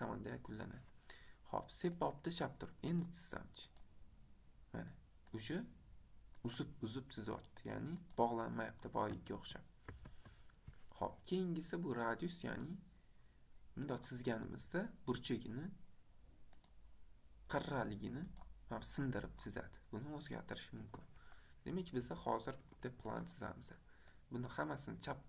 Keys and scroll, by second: 9.3 ctrl+7, 20.9 Escape, 22.7 Escape.